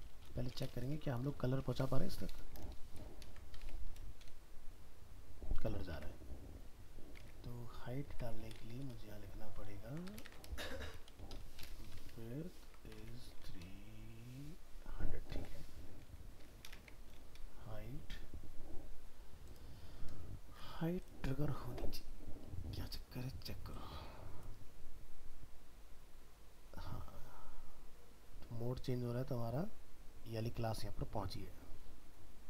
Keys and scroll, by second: 3.2 ctrl+s, 3.6 alt+Tab, 10.3 ctrl+shift+Left, 12.1 ctrl+s, 13.0 alt+Tab, 15.9 ctrl+z, 16.5 ctrl+s, 16.8 alt+Tab.